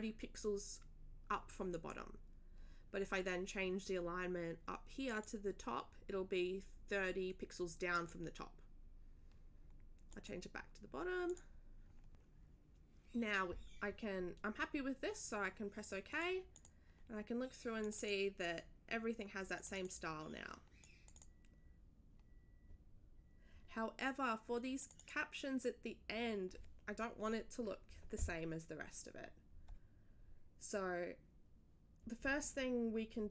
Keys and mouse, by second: 1.7 click, 5.1 click, 7.9 click, 10.1 click, 11.3 click, 16.1 click, 16.5 click, 17.8 click, 19.5 click, 19.7 click, 19.9 click, 20.8 click, 24.8 click.